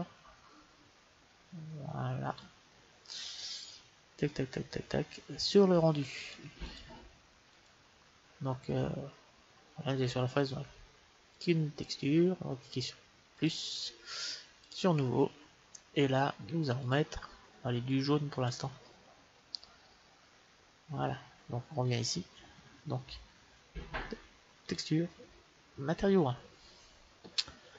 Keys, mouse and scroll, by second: 3.2-8.1 middle drag, 6.1-8.5 drag, 8.3-11.2 middle drag, 11.2-13.1 drag, 13.3-16.4 drag, 16.7-18.5 drag, 21.8-23.8 drag, 22.9 middle click, 24.5-26.5 drag.